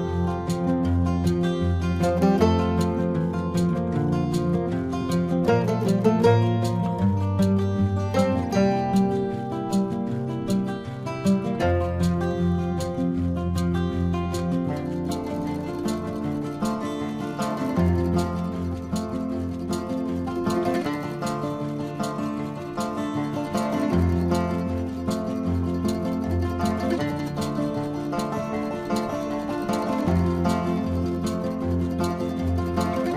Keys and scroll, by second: 7.7 space, 8.4 ctrl+-, 9.1 ], 9.7 ], 11.0 space, 18.1 ctrl+alt+z, 18.8 space, 26.6 ctrl+alt+z, 27.9 ctrl+alt+z, 31.1 space, 32.8 ctrl+alt+z.